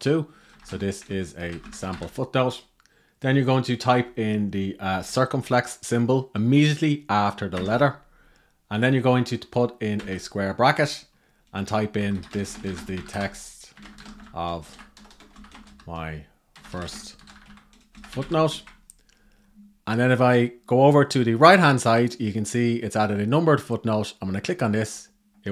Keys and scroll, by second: 7.2 shift+6, 18.3 Right.